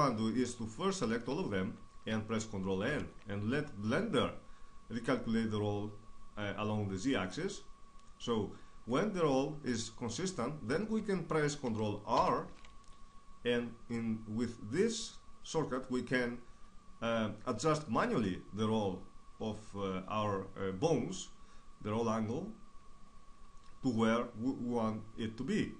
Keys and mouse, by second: 0.4 ctrl+n, 6.3-9.7 middle drag, 9.7 ctrl+r.